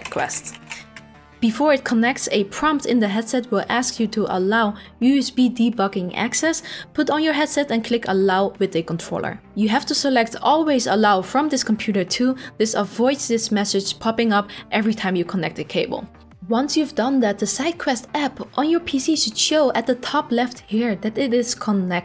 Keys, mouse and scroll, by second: 0.9 click, 0.9 typing, 16.2 click, 19.1-22.0 drag.